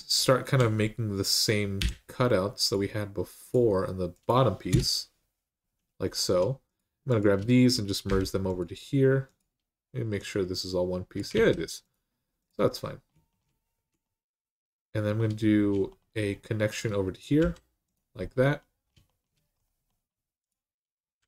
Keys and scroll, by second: 1.6 k, 4.5 Return, 7.8 m, 11.1 ctrl+z, 17.2 j, 21.0 typing.